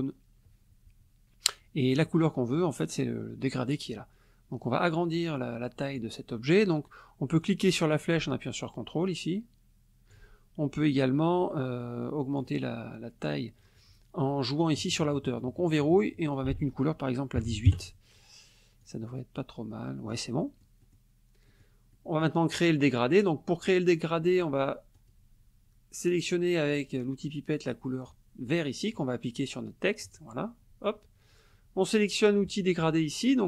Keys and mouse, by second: 1.9 click, 4.6-6.2 drag, 7.4-10.3 drag, 10.9-12.6 drag, 15.7 click, 16.3 ctrl+click, 16.5 ctrl+a, 17.4 KP_1, 17.7 KP_Enter, 18.8-20.3 drag, 20.4 middle click, 21.5 middle click, 21.9 middle click, 25.0 click, 30.1 click.